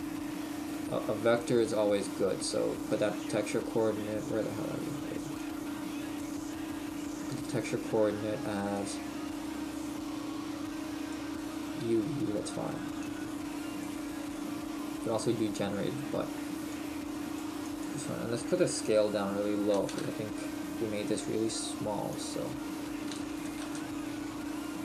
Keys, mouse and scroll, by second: 4.0-4.5 scroll down 2, 4.5-5.6 scroll down 3, 5.6 click, 5.6-6.5 scroll down 5, 6.7-8.0 scroll up 4, 11.1 scroll up 5, 13.1 click, 22.3 click.